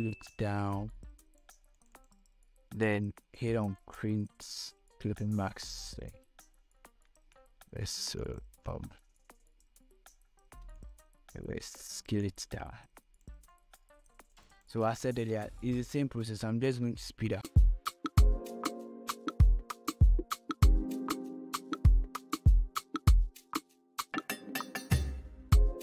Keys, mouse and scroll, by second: 4.6 right click, 5.5-8.5 drag, 8.5 ctrl+t, 9.9 click, 10.6 scroll down 1, 11.4 scroll up 1, 12.4 space, 12.6 click, 12.9 space, 13.9-16.0 drag, 17.4-17.8 scroll down 2, 18.7 click, 19.4-22.1 drag, 22.1 ctrl+., 22.4 ctrl+t, 22.8-24.0 alt+drag, 24.0 click, 25.1-25.8 drag.